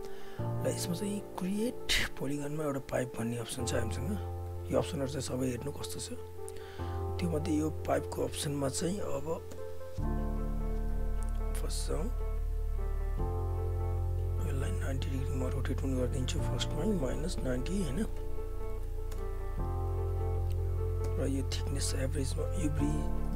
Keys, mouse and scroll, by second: 0.8 click, 3.7 click, 4.4 f, 4.9 alt+click, 5.7 alt+right click, 5.9 alt+click, 7.3 alt+right click, 7.6-9.5 alt+drag, 9.5 space, 10.9 e, 13.6-17.7 drag, 19.1 Return, 20.2 alt+right click, 20.5 alt+click, 21.0 space, 21.7 alt+Tab.